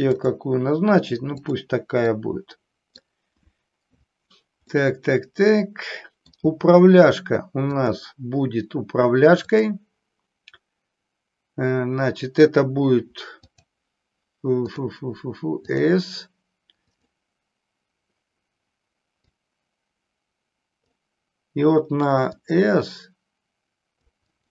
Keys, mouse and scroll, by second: 1.4 drag, 2.2-3.0 middle drag, 4.7-6.4 middle drag, 7.8-8.9 drag, 9.4-13.7 drag, 14.8-15.9 drag, 16.9 click, 19.2-21.0 drag, 22.4-24.2 drag, 24.4-24.5 drag.